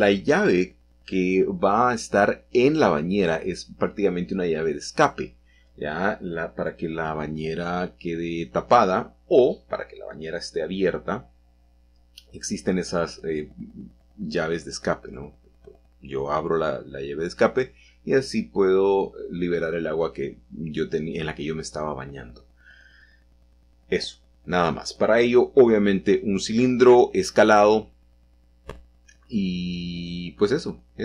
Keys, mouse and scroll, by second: 0.0 r, 2.0 x, 4.7 g, 5.3 shift+z, 6.8-8.4 drag, 7.3 s, 9.0 click, 10.0-10.7 typing, 11.0 Return, 12.3 g, 12.7 z, 14.3-15.4 drag, 15.9 s, 17.2-18.3 drag, 21.2 s, 21.8 shift+x, 22.8 Escape, 25.3 s, 25.7 shift+z, 27.0 Escape, 28.0 s, 30.5 shift+y.